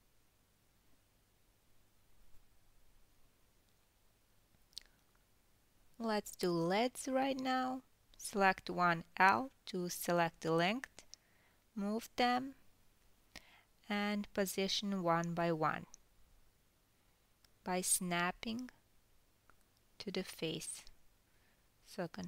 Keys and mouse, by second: 0.7 g, 1.9-6.1 ctrl+middle drag, 6.5-8.4 ctrl+middle drag, 8.9 ctrl+s, 9.9 alt+middle click, 10.2 alt+click, 10.3-14.6 alt+middle drag, 11.1 l, 12.4 g, 14.6 click, 14.7 middle click, 15.1 g, 16.7 click, 17.5 g, 19.1 click, 20.1 click, 20.2-22.0 middle drag, 20.5 g, 22.0 click, 22.1-22.2 middle drag.